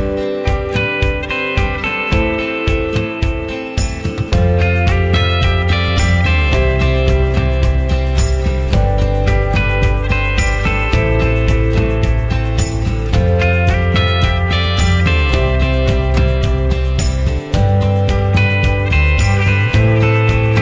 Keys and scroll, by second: 12.1 ctrl+z.